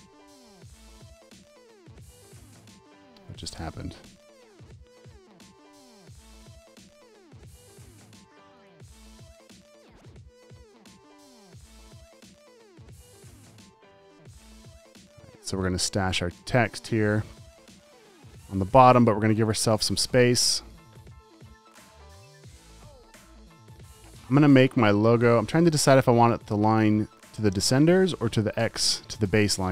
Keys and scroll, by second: 0.4 typing, 1.6 super+;, 2.2 shift+super+z, 3.5 space, 4.4 space, 5.0 alt+super+space, 6.3 super+z, 10.8 BackSpace, 11.5 space, 12.0 space, 13.5 BackSpace, 14.4 space, 17.7 v, 20.1 space, 20.6 space, 21.1 space.